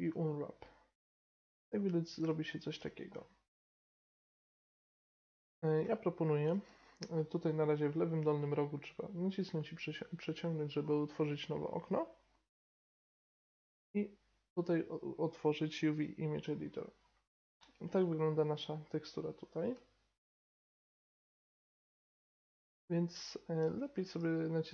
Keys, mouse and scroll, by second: 1.6-3.6 middle drag, 3.6 KP_7, 8.8 click, 9.7-16.0 drag, 20.6-22.5 drag, 21.8 right click.